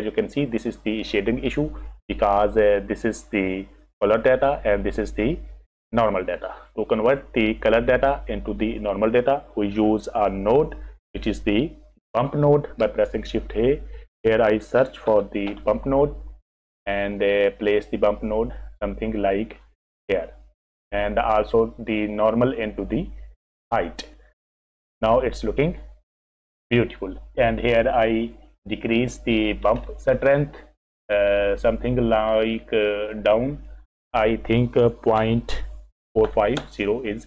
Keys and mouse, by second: 2.1 click, 6.5 click, 13.3 shift+a, 21.7 click, 22.0-24.0 drag, 30.9-33.7 drag, 33.9-37.2 drag.